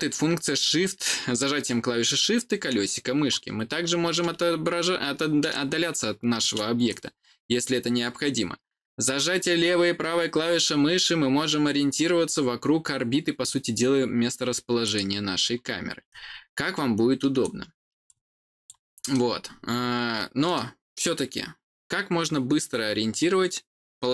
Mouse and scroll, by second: 1.9-3.3 middle drag, 3.6 scroll down 2, 4.0 scroll up 2, 4.3-5.4 scroll down 4, 5.4 middle click, 6.8-14.8 drag, 6.8-14.9 right drag, 16.0-17.3 right drag, 18.0 click, 19.0-20.4 middle drag.